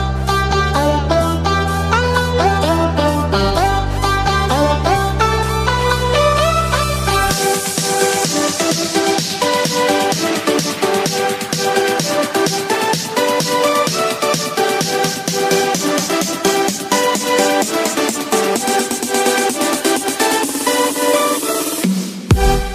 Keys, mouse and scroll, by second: 6.9-9.8 middle drag, 9.8 shift+s, 14.5 shift+a, 17.3 s, 20.8-21.6 middle drag, 22.6-22.7 right drag.